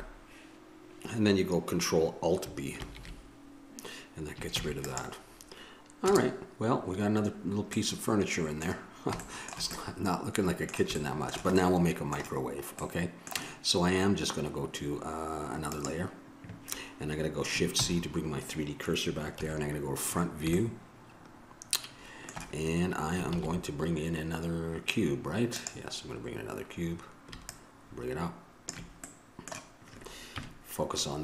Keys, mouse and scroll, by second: 0.0 Escape, 3.0 ctrl+alt+b, 6.3 KP_0, 9.5 click, 10.6-13.1 middle drag, 15.9-17.9 drag, 17.9 shift+c, 19.6 KP_1, 20.8-21.8 middle drag, 23.5 shift+a, 28.8 click, 29.6-31.2 middle drag, 30.5 KP_Decimal.